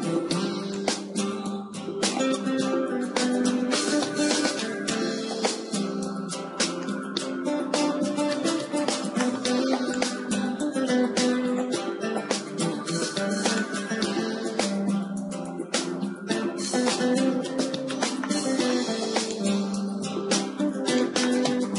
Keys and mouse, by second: 3.6 KP_1, 5.5-7.7 drag, 7.7 g, 10.8-15.7 drag, 10.8 g, 19.4-21.3 drag.